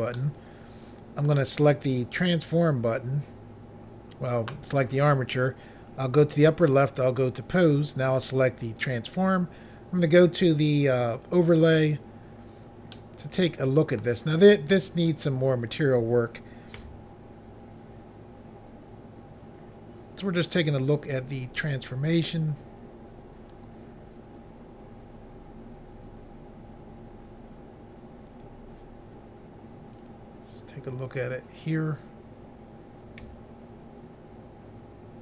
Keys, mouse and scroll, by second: 0.1 middle click, 1.8 click, 1.9 click, 6.3 click, 6.4 click, 7.2 click, 7.4 click, 8.6 click, 8.8 click, 11.2 click, 11.3 click, 12.1-12.6 scroll down 1, 12.9 middle click, 16.7 s, 28.3 click, 28.4 click, 30.1 click, 31.0 click, 33.2 s.